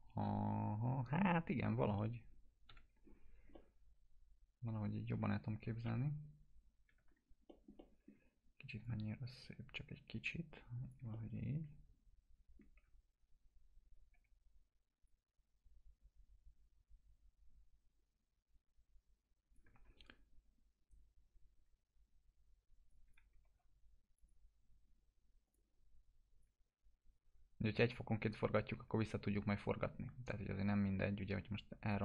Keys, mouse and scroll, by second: 1.8-3.5 scroll down 4, 2.7 p, 3.6-5.4 alt+middle drag, 5.4 scroll up 1, 5.8 ctrl+z, 7.1 scroll up 1, 7.5 middle click, 7.8 alt+middle click, 8.9-11.1 drag, 11.2-12.7 alt+middle drag, 14.2 e, 15.1-19.8 drag, 19.9 ctrl+z, 20.9 right click, 22.9 click, 23.4 1, 24.2-29.9 drag.